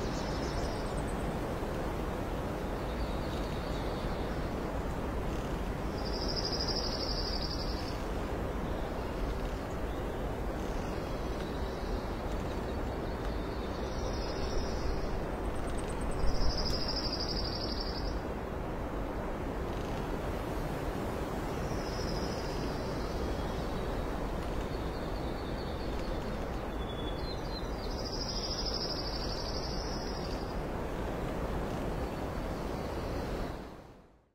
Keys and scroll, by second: 0.8 ctrl+z, 9.0 KP_0, 11.6 ctrl+s, 19.6 ctrl+d, 19.8 ctrl+z, 21.1 alt+space, 21.7 shift+F9, 23.7 ctrl+s.